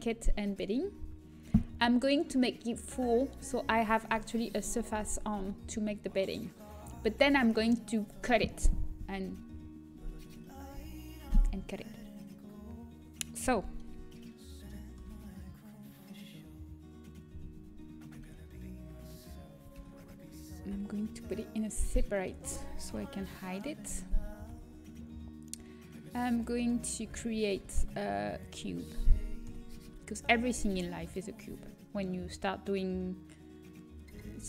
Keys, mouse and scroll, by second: 14.9 Tab, 18.1 Tab, 19.7 alt+h, 21.3 p, 21.8 Tab, 22.1-23.3 drag, 22.8 h, 23.3 middle click, 24.5 shift+a, 26.5-28.5 drag, 26.9 Tab, 27.5 shift+a, 29.4 KP_7, 29.8 z, 31.4 s.